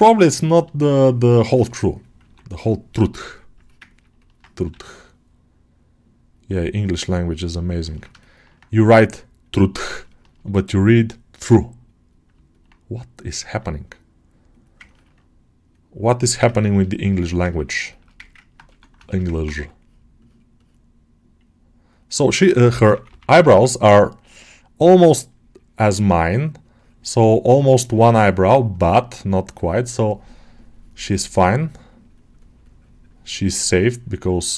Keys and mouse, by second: 0.1 ctrl+alt+middle click, 0.4 alt+middle click, 1.5 click, 2.4 right click, 2.8 right click, 3.5 alt+middle click, 3.8 alt+middle click, 7.8 ctrl+alt+middle click, 8.1 alt+shift+middle click, 10.0 shift+middle click, 10.5-12.2 drag, 12.4 alt+middle click, 13.8 click, 14.7 ctrl+alt+middle click, 15.6 click, 16.4 ctrl+alt+middle click, 16.8 alt+shift+middle click, 17.4 ctrl+alt+middle click, 17.8 shift+middle click, 18.1 ctrl+alt+middle click, 18.9 ctrl+alt+shift+middle click, 19.4 2, 20.0 click, 21.8-25.0 drag, 25.2 click, 25.9 click, 27.1-28.6 drag, 29.1-31.3 drag, 31.5-34.3 drag.